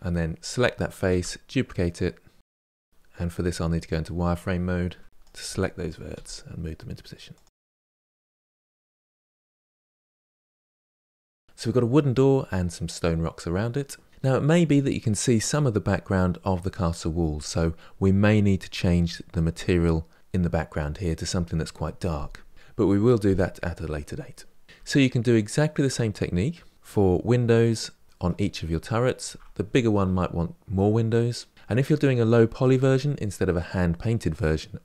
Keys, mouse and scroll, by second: 0.3 shift+d, 2.6 click, 3.2-10.1 typing, 3.7 click, 5.1 middle click, 5.3 click, 5.6 middle click, 6.3 click, 6.7 click, 7.0 click, 7.3 click, 7.9 click, 8.7 click, 9.3 click, 10.0 click, 10.8 Tab, 10.9 scroll down 5, 10.9 middle click, 11.1 click, 11.4 click, 24.6 scroll down 4, 24.7-28.0 shift+middle drag, 29.5-31.5 shift+middle drag.